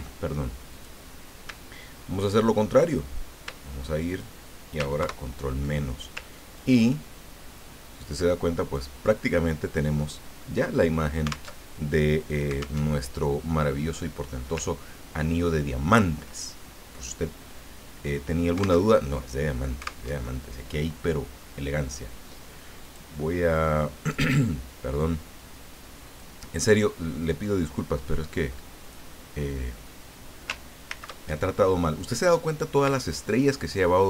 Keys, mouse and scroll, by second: 0.7 click, 4.1 shift+click, 5.0 ctrl+shift+KP_Subtract, 6.5-9.6 ctrl+drag, 11.6 alt+Tab, 12.8 alt+Tab, 14.9 ctrl+scroll up 2, 18.9 alt+Tab, 20.1 alt+Tab, 22.8 click, 26.3-29.3 drag, 30.9 ctrl+shift+c, 32.0 click, 33.4 shift+click.